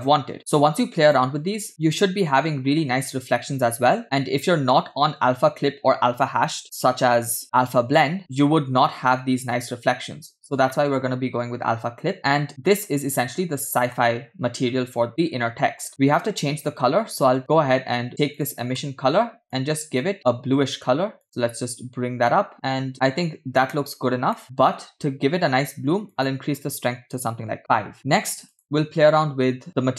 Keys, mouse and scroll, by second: 0.0 click, 1.7-3.6 middle drag, 1.7-3.6 scroll up 2, 10.6 scroll down 2, 14.8 middle click, 14.8-15.1 scroll down 1, 17.4 click, 18.4 drag, 18.9 middle click, 19.6 click, 20.2 click, 21.6 click, 24.7 middle click, 26.1-27.4 drag, 28.1-28.5 scroll down 2, 28.5 drag.